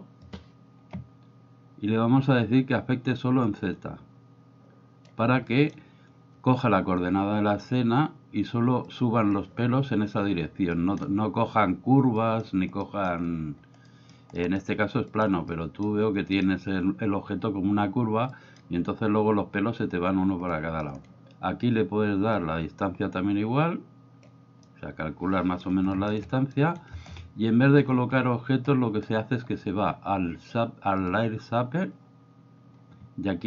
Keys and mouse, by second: 3.5-5.0 drag, 5.5 middle click, 9.0 click, 10.7 middle click, 12.2 middle click, 12.8-13.1 middle drag, 13.9 middle click, 14.4 middle drag, 15.1 middle click, 15.4-15.8 middle drag, 16.3 middle click, 18.3 middle click, 20.4-20.8 middle drag, 22.4-24.3 drag, 24.7-25.6 middle drag, 26.0-26.6 shift+middle drag, 31.0 click.